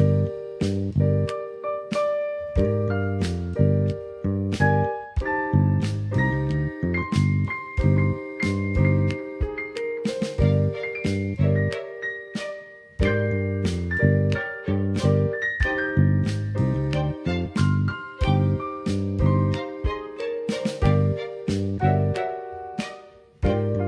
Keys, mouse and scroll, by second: 0.8 click, 2.0 q, 4.6-5.1 drag, 5.1 middle click, 7.2 shift+middle click, 8.1 middle click, 12.6 click, 13.5 middle click, 17.8-23.8 drag.